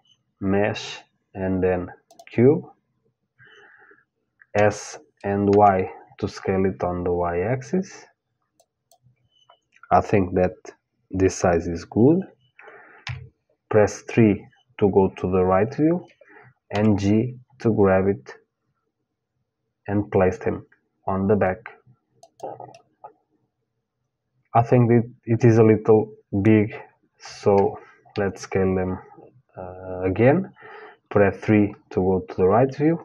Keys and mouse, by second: 4.1 s, 12.7 KP_3, 16.3 g, 22.4-24.3 middle drag, 27.7 KP_3.